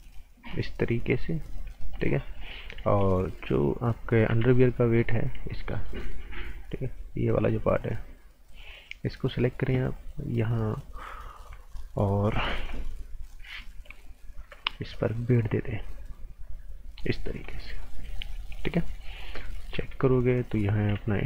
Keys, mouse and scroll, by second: 0.6 scroll up 1, 0.9 right click, 2.8 a, 4.0-4.8 typing, 5.0 click, 5.7 right click, 6.6 scroll up 1, 7.4 click, 15.7 click, 17.2 scroll down 1, 17.4 right click, 18.4 scroll up 1, 18.5 right click, 19.0 scroll down 1, 19.2 right click, 19.5 z, 21.0-21.2 typing.